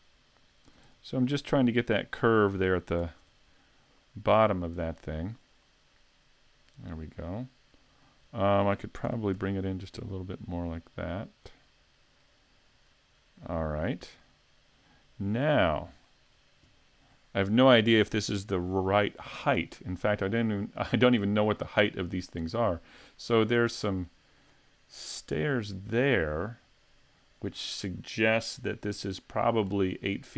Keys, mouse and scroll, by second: 0.1 right click, 0.7 s, 2.2 click, 3.0 a, 3.2 Tab, 3.4-4.1 scroll down 7, 4.5 shift+middle click, 5.7 middle click, 8.0 middle click, 9.1 s, 11.6 click, 12.2 middle click, 13.5-14.2 scroll down 1, 14.2 middle click, 15.7-16.1 scroll up 3, 16.1 shift+middle click, 21.1-24.2 scroll down 1.